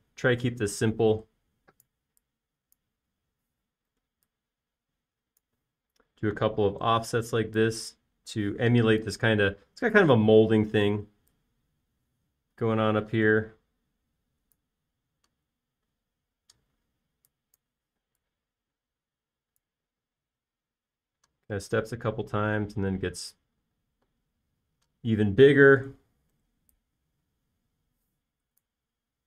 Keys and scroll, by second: 0.6 p, 5.6 f, 8.3 typing, 10.1 Escape, 12.3 p, 17.6 e, 19.4 typing, 21.5 typing, 25.5 space, 27.7 f.